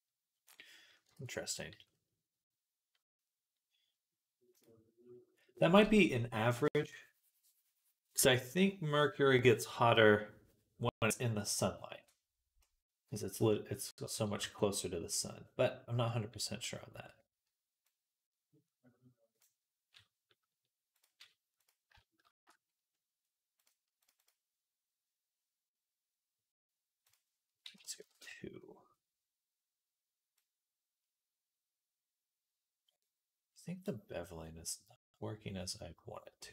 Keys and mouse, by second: 1.0 ctrl+s, 4.4-17.7 right drag, 14.2 Tab, 21.5-23.4 shift+right drag.